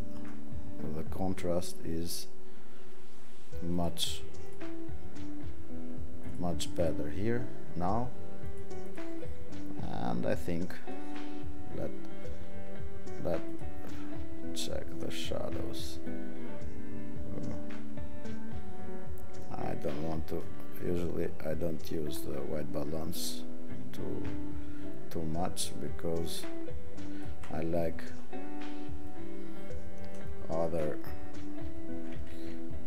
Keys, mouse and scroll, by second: 32.3 ctrl+z.